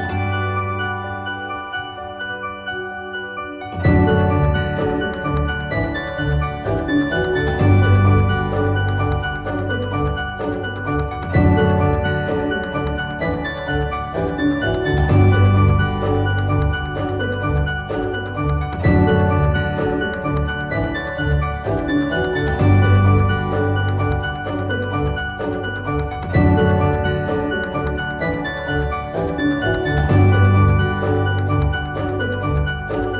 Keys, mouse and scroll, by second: 3.5-7.2 drag, 5.7-6.3 click, 7.2 ctrl+g, 8.1-8.7 drag, 11.9 ctrl+g, 13.1 click, 15.4 ctrl+u, 16.0-21.0 drag.